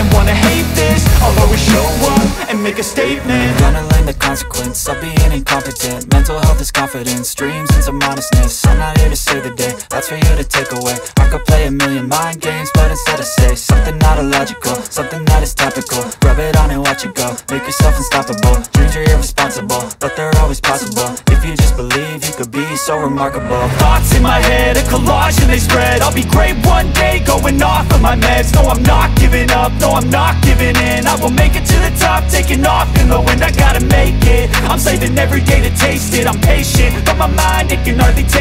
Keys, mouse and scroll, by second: 5.2 click, 6.5-6.8 scroll, 8.2 g, 8.7 x, 10.8 click, 11.5 middle click, 11.6 middle click, 12.5 scroll, 12.8 g, 16.3 click, 16.8-17.2 scroll, 19.8-21.0 scroll, 24.5 ctrl+r, 26.6 scroll, 27.4 middle click, 27.6-28.6 scroll, 28.6-29.1 scroll, 29.1-31.0 scroll, 32.2-34.2 scroll, 38.3 click.